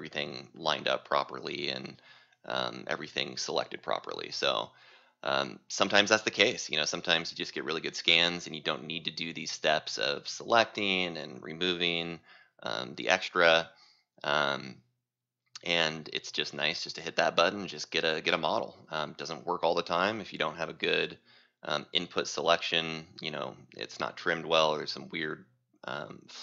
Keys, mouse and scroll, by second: 17.4-19.8 drag, 20.0 right click, 21.7 c, 22.9 right click, 24.0 click, 25.3 right click.